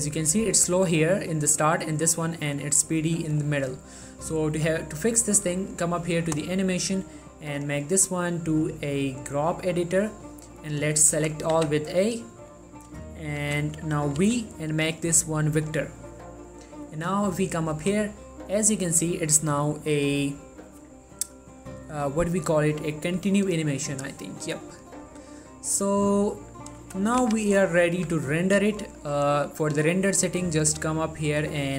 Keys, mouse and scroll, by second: 10.7-11.1 scroll down 1, 11.3 ctrl+a, 12.4 scroll down 1, 12.7 middle click, 13.5-14.3 typing, 15.7 click, 17.9 space, 27.0 space, 28.1 z, 29.9 click.